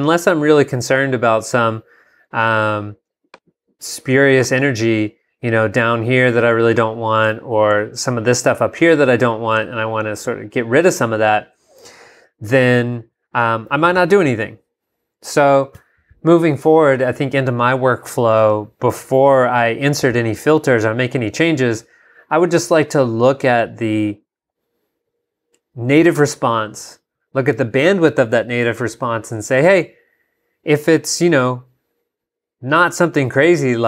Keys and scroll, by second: 32.2 super+Tab.